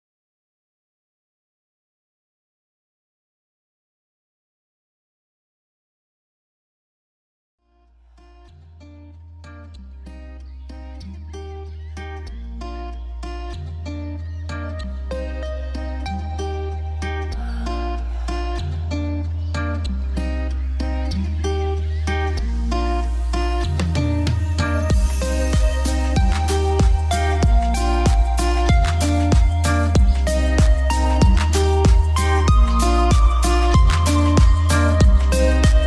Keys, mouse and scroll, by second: 0.4 shift+Page_Down, 0.9 right click, 1.7 click, 3.7 F2, 3.8 click, 4.8 shift+Page_Up, 5.8 click, 6.3 shift+F2, 6.8-14.3 drag, 7.6-8.3 typing, 9.4-10.1 typing, 14.3 c, 14.8-17.1 drag, 15.5 typing, 17.5 F3, 19.3 click, 20.2 F2, 20.5 click, 21.6 shift+Page_Up, 22.4-26.4 shift+drag, 26.4 F2, 26.6-28.0 drag, 28.0 typing, 29.1 shift+click, 30.5 F3, 31.9-35.8 drag.